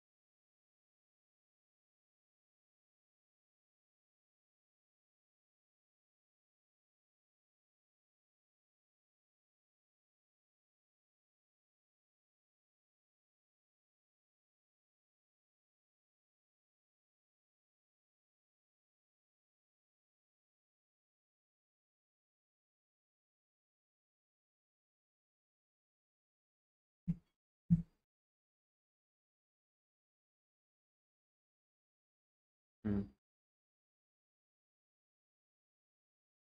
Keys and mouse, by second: 0.3 click, 0.9 click, 2.1 g, 2.1 z, 2.9 x, 4.3 click, 5.3 Tab, 5.9-6.5 middle drag, 7.0 middle click, 8.9 Tab, 9.3 shift+middle click, 10.2 click, 11.5 g, 11.9 z, 12.7 y, 15.3 click, 15.9 click, 16.8 g, 17.6 x, 18.9 click, 19.5 Tab, 20.6 g, 20.9 x, 22.7-23.6 drag, 23.7 Tab, 24.3 click, 25.2 g, 25.4 y, 27.0 Tab, 28.1-28.7 middle drag, 29.0 shift+middle click, 29.7-36.1 middle drag.